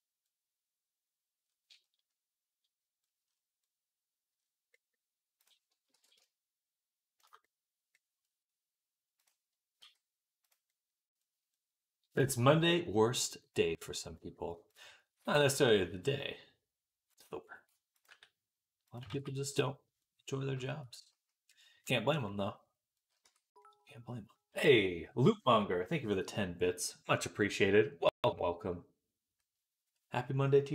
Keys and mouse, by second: 5.8 alt+s, 9.6 s, 15.3 g, 17.9 g, 19.0 ctrl+z, 23.1 Tab.